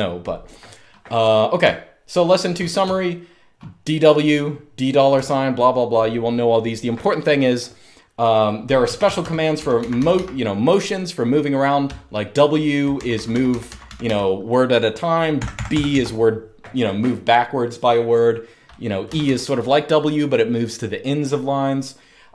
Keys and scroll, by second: 1.3-3.5 typing, 4.8 j, 5.1 j, 5.4 j, 8.5-9.8 typing, 12.6-13.7 typing, 15.1-15.6 typing, 18.8 typing.